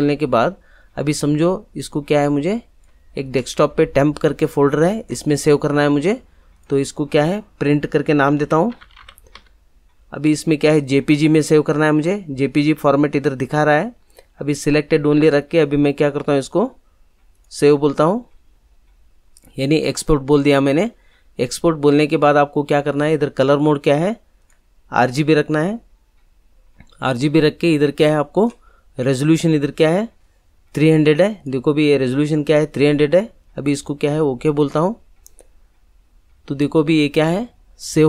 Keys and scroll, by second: 8.3-9.3 typing.